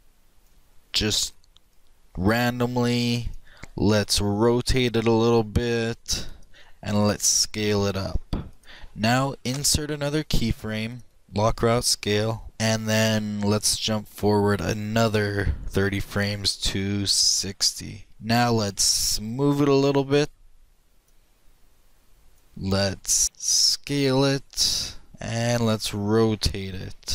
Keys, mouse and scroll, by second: 1.8-3.6 drag, 4.4 r, 7.2 s, 9.9 i, 12.0-13.7 middle drag, 13.7-15.7 drag, 20.4-22.5 drag, 23.6 s, 25.6 r.